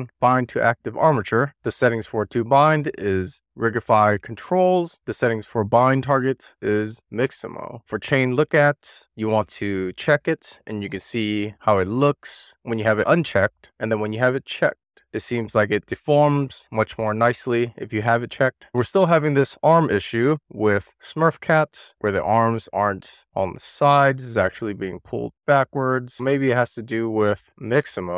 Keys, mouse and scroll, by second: 1.4 middle click, 1.8-4.5 drag, 5.5-7.6 drag, 7.6-8.7 scroll up 4, 8.7 click, 9.3 click, 9.9 shift+middle click, 11.8 click, 13.6 click, 13.9 middle click, 15.6 click, 16.7 click, 17.8-19.5 middle drag, 20.6 scroll down 1, 20.8-21.7 middle drag, 22.2 click, 22.5 click, 23.3 click, 24.0-25.4 middle drag, 25.5-26.5 middle drag, 27.0 click, 27.4-28.1 middle drag.